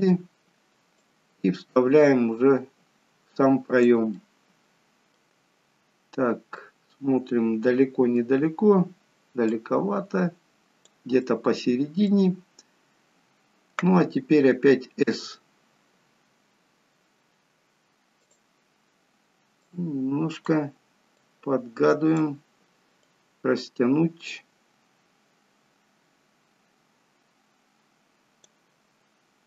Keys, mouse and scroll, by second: 1.0 click, 1.0-1.7 scroll down 2, 4.2 middle click, 5.7-6.2 scroll up 2, 6.6 middle click, 9.5 click, 11.2 middle click, 15.8 s, 19.6 click, 21.2 click.